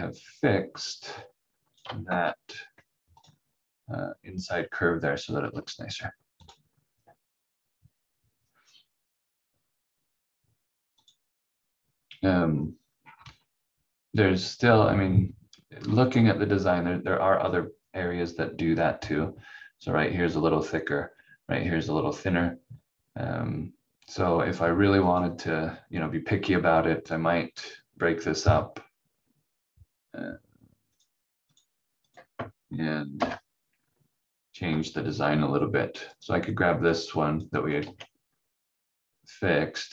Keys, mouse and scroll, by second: 2.1 shift+F2, 3.2 click, 6.3 click, 10.9 click, 12.5 scroll up 1, 13.6 scroll down 1, 25.0 click, 30.9 click, 33.1 Delete, 36.1 click, 37.8 ctrl+z.